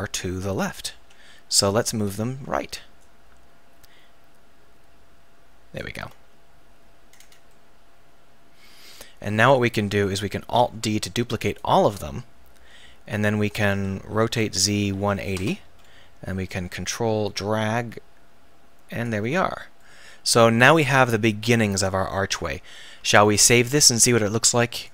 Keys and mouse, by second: 1.0 KP_1, 3.0-5.0 drag, 7.2-8.6 middle drag, 10.6 alt+d, 12.8 KP_1, 14.1 r, 16.5-19.1 drag, 19.5-21.7 middle drag, 23.1 ctrl+s.